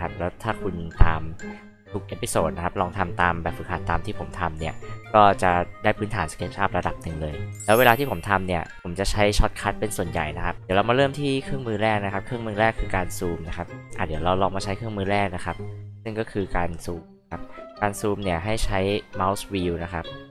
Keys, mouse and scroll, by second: 12.3 alt+drag.